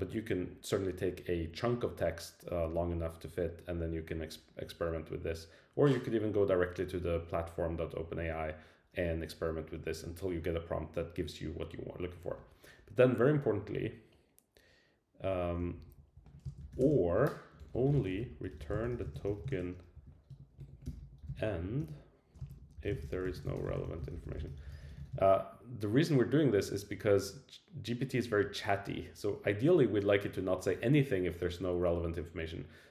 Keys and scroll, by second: 15.3 Up, 15.6 alt+Left, 16.2 Right.